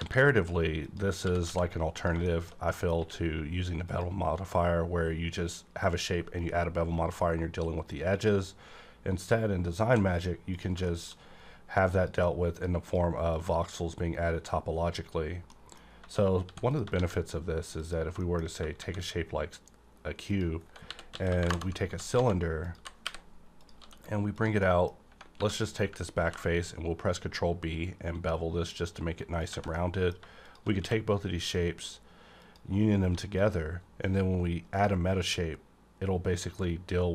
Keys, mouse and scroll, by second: 0.0 shift+a, 0.8 click, 1.2 g, 1.4 x, 1.9 click, 2.2 middle click, 3.0 q, 3.9 click, 4.6 scroll up 1, 5.3-5.9 scroll up 1, 8.1 scroll up 1, 8.1 click, 9.9 x, 10.1 click, 10.8 shift+middle click, 11.9 click, 12.5 click, 15.5 middle click, 16.4 x, 16.7 click, 16.9 shift+a, 17.8 click, 18.2 middle click, 18.8 shift+a, 20.3 click, 20.9-23.8 typing, 21.4 KP_Enter, 22.6 click, 23.6 click, 24.3 click, 24.6 middle click, 24.9 scroll up 1, 25.1 Tab, 25.4 3, 25.6 click, 26.2 b, 26.7 scroll up 1, 29.4 click, 29.5 Tab, 29.7 middle click, 30.4 click, 30.8 q, 32.4 click, 33.0 1, 33.4 click, 34.7 click.